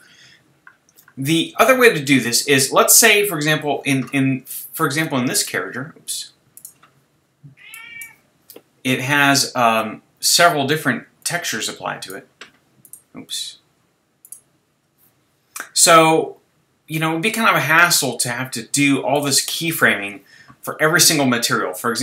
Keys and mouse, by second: 0.7-5.4 middle drag, 10.9-12.8 middle drag.